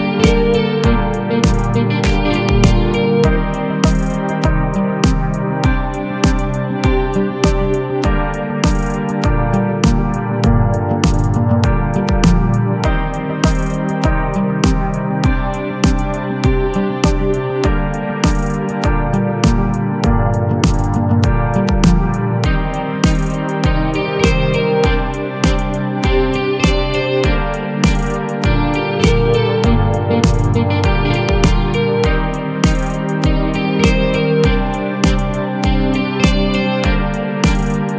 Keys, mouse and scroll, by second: 2.9 scroll down 2, 3.2 a, 3.3 a, 3.7-4.7 middle drag, 4.7 scroll up 1, 5.2-6.6 shift+middle drag, 6.6 click, 6.9 Tab, 7.2 a, 7.5 s, 9.0 Tab, 9.9 KP_7, 10.9 z, 11.8 Tab, 12.2-15.7 typing, 18.2 scroll down 1, 19.1 a, 19.5 shift+d, 20.0 r, 20.8 g, 22.3 g, 23.2 r, 24.0 g, 26.7 a, 27.2 shift+d, 27.7 r, 29.2 g, 31.2 g, 35.3 a, 35.7 Tab, 36.1-36.5 middle drag, 36.5 z, 36.8-37.3 middle drag, 37.3-37.9 scroll up 3.